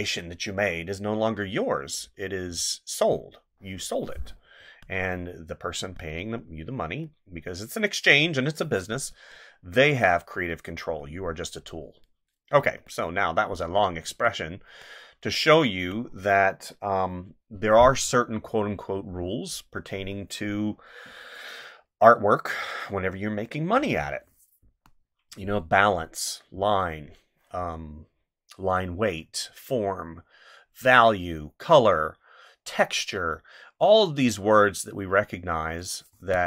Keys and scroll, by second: 4.6 space, 12.6 space, 24.6 space, 36.1 space.